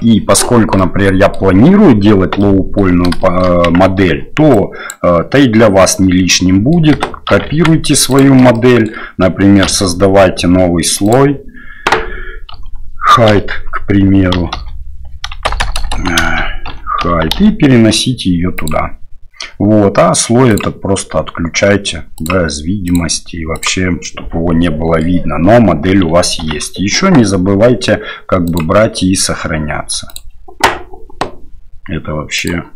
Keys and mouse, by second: 0.8-1.3 middle drag, 2.4-2.8 middle drag, 3.2 shift+click, 3.6 Tab, 4.7 drag, 5.4 drag, 5.7-6.6 middle drag, 6.6 click, 7.4 shift+d, 8.6 shift+click, 9.6 m, 15.6 BackSpace, 20.5 click, 22.8 click, 23.5 click, 24.0-25.0 middle drag, 26.4 ctrl+s.